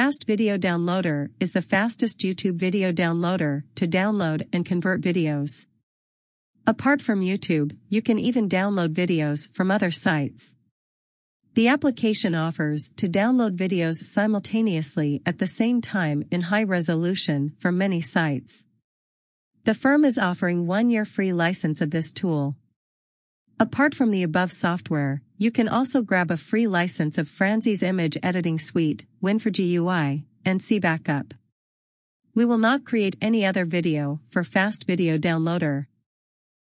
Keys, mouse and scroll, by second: 0.3 click, 1.9 scroll up 1, 3.7 click, 6.3 scroll down 1, 11.6 click, 16.8 click, 17.8 click, 21.4 click, 26.9 click, 32.0 click, 34.7 click.